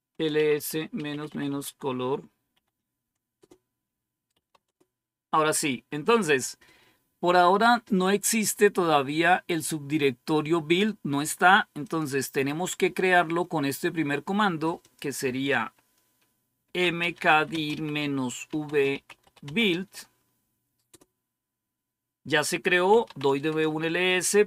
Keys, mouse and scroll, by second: 0.0-2.4 typing, 3.3 Return, 4.0-5.8 typing, 11.7 click, 14.7 click, 15.3 click, 16.3-20.1 typing, 20.8 Return, 22.6-23.6 typing.